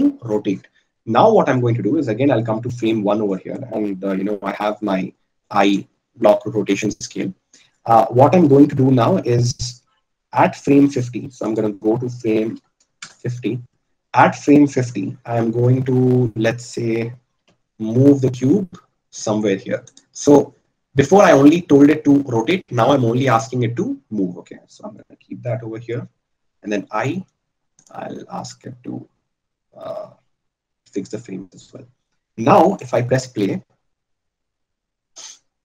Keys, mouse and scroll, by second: 6.3 i, 15.1 g, 27.1 i.